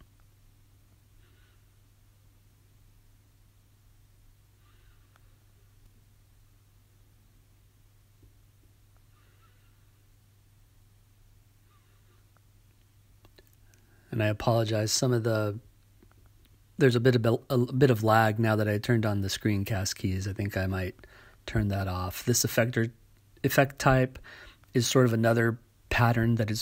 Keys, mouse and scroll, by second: 1.1-5.1 drag, 6.6-8.5 drag, 9.5-11.2 drag, 12.0-14.2 drag, 14.4 right click, 15.7 right click, 17.7-20.0 drag, 20.1-21.4 drag, 20.1 right click, 22.6-26.6 drag.